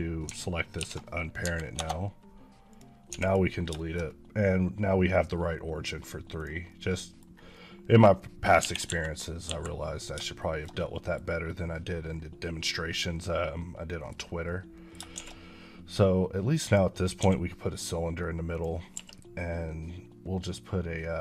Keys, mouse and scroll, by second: 0.6 alt+p, 1.2 Down, 1.6 Return, 2.9 x, 3.8 middle click, 6.2 click, 6.5 middle click, 7.2 scroll down 1, 7.4 middle click, 8.4 KP_1, 8.7 KP_5, 9.3 KP_5, 10.2 shift+middle click, 12.3 middle click, 14.1 scroll up 2, 14.3 middle click, 15.1 a, 16.5 click, 17.1 s, 18.4 click.